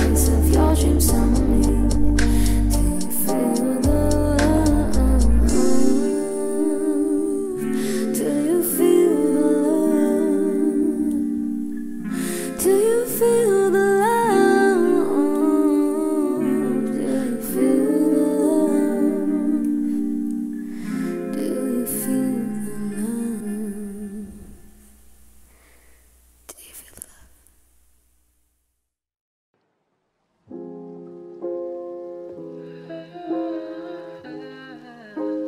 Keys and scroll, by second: 1.0 Delete, 2.6 1, 3.8 q, 11.5 8, 23.1 r, 25.4 ctrl+v, 25.8 space, 27.0 space, 34.0 1, 34.3 Return.